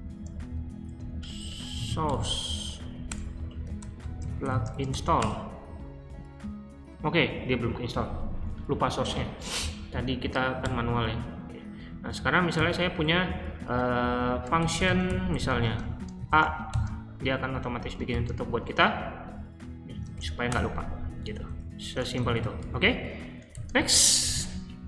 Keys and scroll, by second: 0.0-6.8 typing, 10.6 q, 12.5 i, 14.1-16.6 typing, 18.1 shift+0, 19.9-23.5 typing, 21.2 Escape.